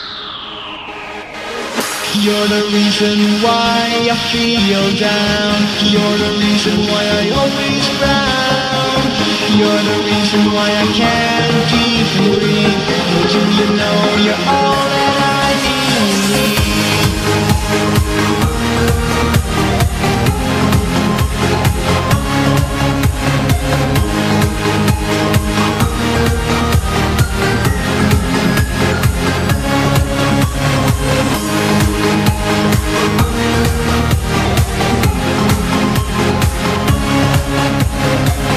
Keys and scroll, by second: 8.1 p, 10.9 p, 17.0 v, 17.6 p, 21.0 z, 24.0 Delete, 24.0 e, 33.2 v, 38.0 v.